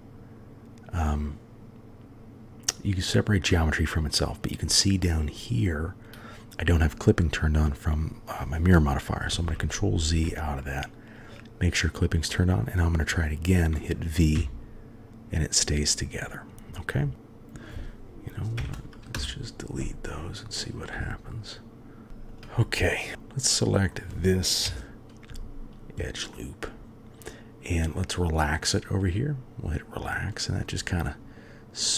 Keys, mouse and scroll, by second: 4.7 middle click, 9.3 ctrl+z, 10.1 ctrl+z, 11.2-11.5 drag, 12.3 middle click, 14.3 v, 17.0-18.6 drag, 18.6 Delete, 20.6 click, 20.9 g, 22.1-23.1 middle drag, 22.1 2, 23.2-23.9 middle drag, 24.7 KP_3, 26.3-26.7 drag, 26.7-27.8 middle drag, 29.0 click, 30.1-30.6 middle drag.